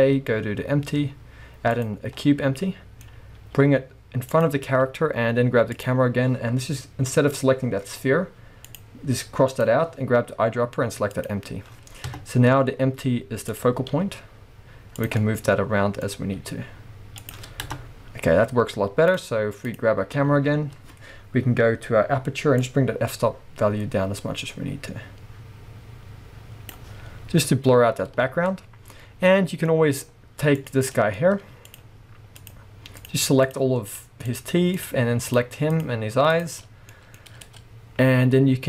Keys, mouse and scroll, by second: 2.2 scroll up 1, 3.4 g, 4.5 click, 4.8-5.7 scroll down 2, 5.7 click, 8.7 click, 9.5 click, 12.1 KP_0, 13.7 click, 14.3 g, 15.4 click, 15.4-17.3 middle drag, 16.0-16.4 scroll up 2, 16.4 g, 17.3 click, 17.7 KP_0, 19.4 click, 20.0 click, 22.9-29.3 drag, 27.2-28.2 scroll down 1, 28.2 alt+a, 29.0 scroll down 1, 29.3-30.7 middle drag, 30.0-30.7 scroll up 2, 30.7 click, 31.0 middle click, 31.3-31.8 scroll up 2, 31.8 shift+click, 32.5 shift+click, 33.1 shift+click, 33.5 shift+click, 34.0 shift+click, 34.3 shift+click, 34.8 shift+click, 35.3 shift+click, 35.8 shift+click, 36.4 shift+click, 36.7 scroll down 1, 36.9-38.6 middle drag, 38.1 g.